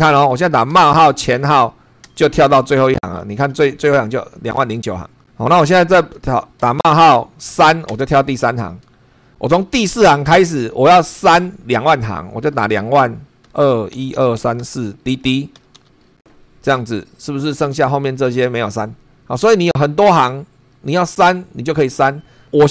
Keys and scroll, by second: 0.0 super+3, 0.7 shift+;, 1.1 shift+4, 2.0 Return, 2.8 Down, 6.6 shift+;, 7.5 3, 7.9 Return, 9.6 Down, 13.4 2, 13.9 0, 15.6 d, 17.8 Down.